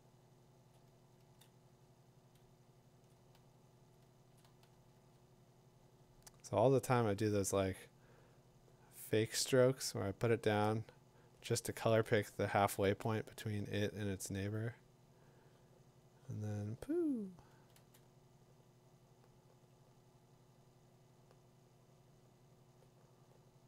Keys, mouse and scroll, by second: 0.8 click, 0.9 [, 1.2 [, 3.1 click, 3.4 ], 4.4 click, 4.7 ], 6.2 ], 10.5 click, 11.9 click, 14.5 [, 17.5 [, 17.7 [.